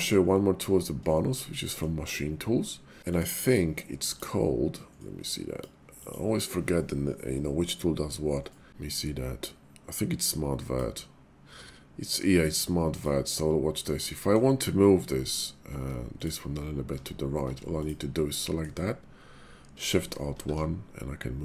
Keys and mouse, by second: 0.3 middle click, 1.1 shift+middle click, 1.5 middle click, 2.4 shift+middle click, 3.0-4.2 drag, 14.2 middle click, 15.7 Tab, 16.1 click, 16.9 Tab, 17.4 Tab, 18.3 middle click, 20.3 alt+shift+1.